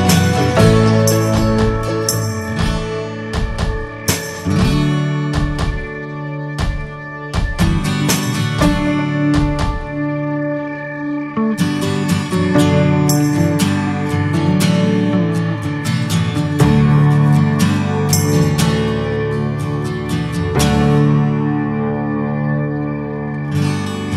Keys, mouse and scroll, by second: 4.5 h, 5.2 ctrl+z, 6.0 g, 10.5 click, 11.5 g, 15.8 click, 18.1 g.